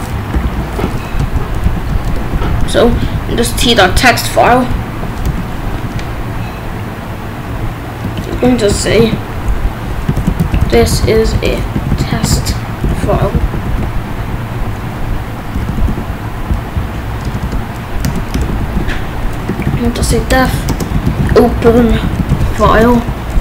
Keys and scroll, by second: 0.4 ctrl+s, 0.8-3.6 typing, 8.0 j, 8.3 BackSpace, 9.0 ctrl+s, 9.8-13.6 typing, 13.6 ctrl+s, 15.5 ., 15.8 ctrl+s, 17.2 Return, 18.0 BackSpace, 18.3 Return, 18.6 ctrl+s, 19.2-23.4 typing.